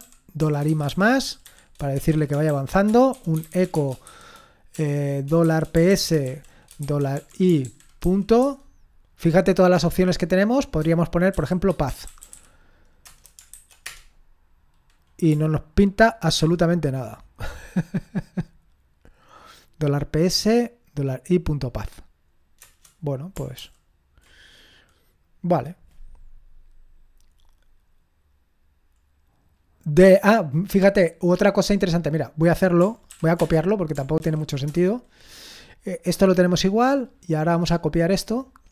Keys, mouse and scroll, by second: 0.0-8.5 typing, 11.1-13.9 typing, 16.4 ctrl+p, 22.6 Return, 27.4-27.9 scroll down 1, 28.9-29.6 scroll down 1, 29.6-32.5 scroll down 1, 32.5 click, 33.4 Return, 34.2 ctrl+l, 34.7 Return, 36.8-38.7 drag, 37.9-38.4 right drag.